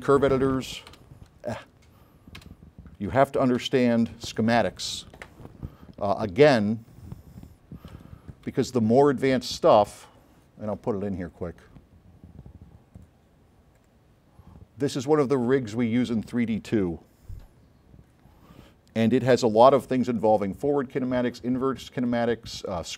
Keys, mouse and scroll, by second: 1.0 0, 2.5 8, 3.8 9, 6.0 scroll up 2, 6.4-6.9 scroll down 4, 8.0 click, 8.0 s, 9.0 click, 10.1 click, 11.4 drag, 16.4 click, 19.4 a, 20.0 s, 20.4 click, 21.1 right click, 21.6 scroll up 1.